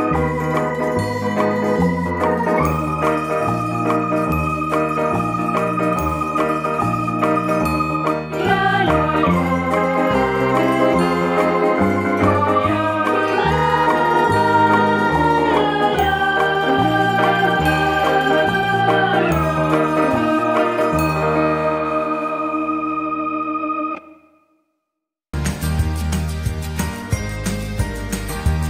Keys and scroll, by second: 10.3 ctrl+t, 16.4 ctrl+alt+z.